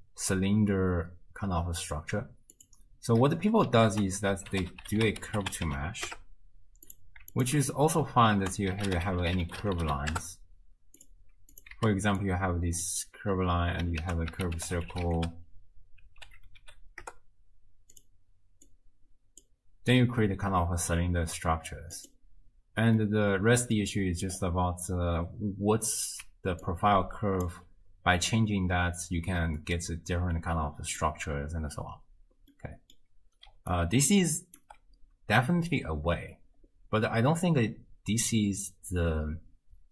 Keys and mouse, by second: 2.6 click, 3.9 ctrl+a, 5.4 space, 7.4 alt+shift+click, 7.8 click, 8.4 ctrl+a, 11.5 click, 12.4 click, 14.0 ctrl+a, 18.9-19.6 drag, 20.3-21.0 drag, 22.0 click, 23.2-23.8 drag, 26.2 d, 26.7 click, 27.5 d, 27.6 d, 29.8-31.0 drag, 32.7 click, 33.5 d, 33.7 middle click, 34.6 d, 34.7 d.